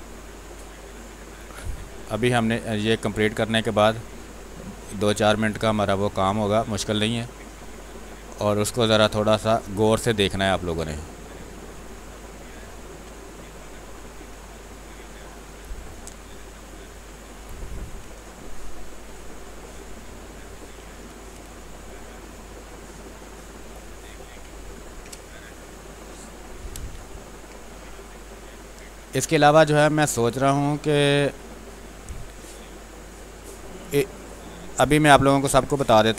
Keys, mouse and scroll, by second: 0.1 click, 0.9 click, 1.3 space, 1.4 click, 1.8 space, 2.4-3.8 drag, 3.8-5.5 drag, 5.5-7.2 drag, 7.2 click, 8.4-9.7 drag, 10.2 space, 10.3 click, 10.7 space, 11.4 click, 12.0 space, 12.2 alt+click, 14.8 click, 15.5 space, 15.8 click, 16.0 space, 16.8 click, 17.4 space, 17.7 alt+click, 18.0 click, 18.8 ctrl+click, 19.7 click, 21.0 space, 21.6-23.3 drag, 23.6 space, 23.9 alt+click, 24.6 ctrl+click, 25.2 r, 25.4 click, 26.4 b, 26.6 space, 26.9 ctrl+click, 27.9 click, 28.9 space, 29.1 click, 29.4 space, 30.1 click, 31.4 click, 32.0 space, 32.2 click, 32.5 space, 33.2 click, 34.5 space, 34.7 click, 35.0 space, 35.6 r, 35.8 click.